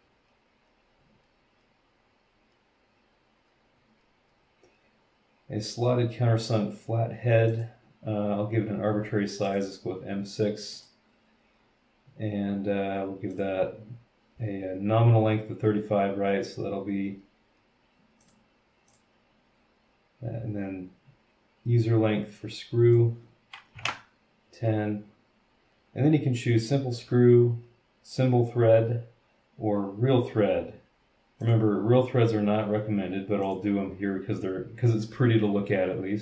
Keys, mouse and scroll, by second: 6.4 click, 7.5 click, 9.4 click, 10.7 click, 13.3 click, 18.2 click, 18.9 click, 21.8-23.1 drag, 23.7 KP_1, 23.8 KP_0, 31.4 click, 33.4 click.